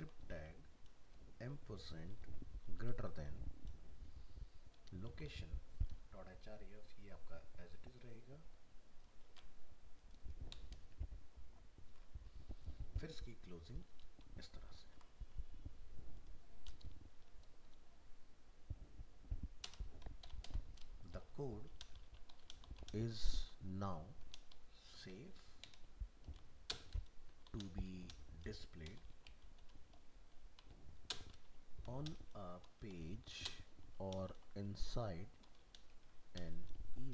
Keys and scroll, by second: 9.3 ctrl+c, 11.9 ctrl+v, 14.8 ctrl+s.